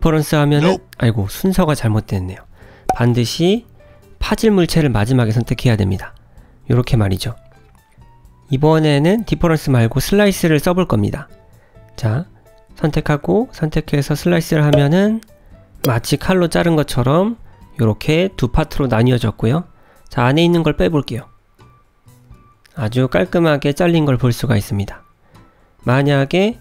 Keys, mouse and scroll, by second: 0.3 click, 1.7 ctrl+z, 2.2 click, 4.0 shift+click, 4.6 middle click, 5.8 click, 6.4 middle click, 8.6 ctrl+z, 11.9 click, 12.3 click, 13.1 shift+click, 14.5 click, 15.1 click, 17.5 Tab, 18.3 Tab, 19.0 g, 25.8 ctrl+z.